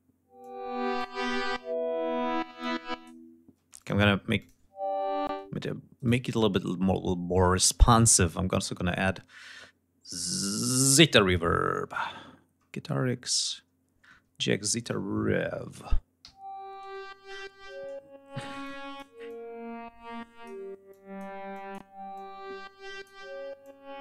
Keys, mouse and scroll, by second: 0.3 click, 2.5 click, 3.5 space, 3.7 click, 4.5 space, 5.2 space, 5.9 right click, 7.3-8.1 scroll down 2, 8.3-8.7 scroll up 2, 12.5-13.0 scroll up 2, 13.3-13.7 scroll down 2, 14.7 click, 16.1 l, 18.5 click, 19.2-20.6 drag, 20.8 click, 21.4 click, 22.1 click, 23.5 click.